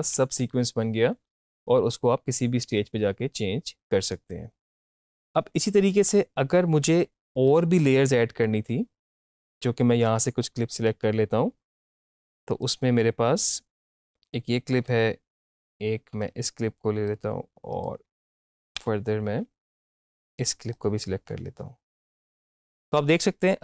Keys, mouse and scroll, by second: 4.0 click, 5.0 -, 7.4-9.2 drag, 9.2 =, 9.4 =, 9.7 =, 10.0-12.5 drag, 13.0 -, 13.7-17.7 drag, 18.5 Down, 20.7-22.1 drag.